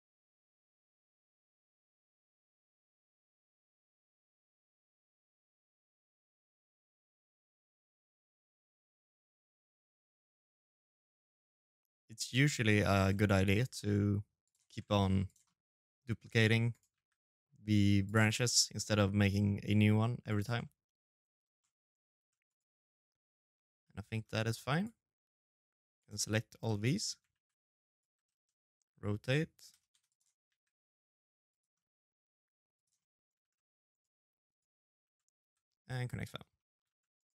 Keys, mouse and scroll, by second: 1.5 shift+right click, 1.5 middle click, 1.5 shift+z, 1.5 f, 1.5 g, 2.0 right click, 2.3 right click, 2.6 g, 3.2 middle click, 4.3 right click, 4.6 g, 5.0 middle click, 5.3 g, 6.0 middle click, 6.7 scroll up 3, 6.8 shift+z, 7.0 right click, 7.1 middle click, 7.3 e, 8.0 middle click, 8.4 ctrl+a, 9.0 ctrl+a, 9.5 middle click, 9.7 shift+z, 9.9 middle click, 10.3 middle click, 10.6 shift+middle click, 10.9 middle click, 11.6 middle click, 11.9 shift+middle click, 12.4 e, 13.6 ctrl+a, 14.2 middle click, 15.4 right click, 15.7 g, 17.0 middle click, 18.0 right click, 18.2 middle click, 18.6 g, 19.4 middle click, 20.1-20.4 scroll down 4, 20.4 middle click, 20.9 shift+z, 21.2 right click, 21.6-22.4 scroll down 2, 21.8 middle click, 22.6 c, 25.0 middle click, 25.5 shift+z, 25.6 middle click, 26.1 shift+d, 26.8 r, 29.2 g, 30.5 middle click, 31.0 g, 31.7 middle click, 32.2 shift+z, 32.7 right click, 33.2 shift+right click, 33.9 shift+z, 34.2 f, 34.4 middle click, 35.1 scroll up 3, 35.3 middle click, 35.6-37.3 typing, 35.9 right click.